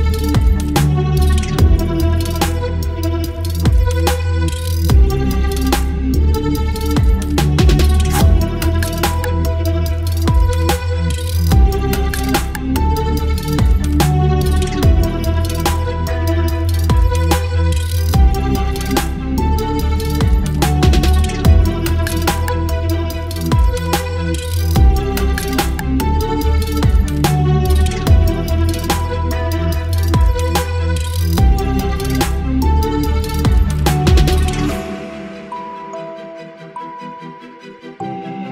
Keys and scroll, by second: 14.3 l, 19.2 Delete, 20.6 space, 24.5 Delete, 29.6 Delete, 31.5 ctrl+d, 34.1 ctrl+d.